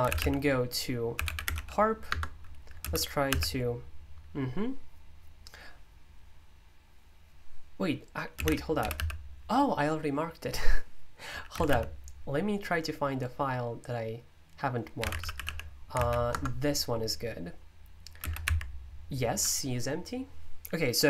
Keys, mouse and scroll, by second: 0.0-3.2 typing, 8.1-9.4 typing, 11.2-12.1 typing, 14.7-15.9 typing, 15.9 ctrl+p, 16.3 Return, 17.9-18.7 typing.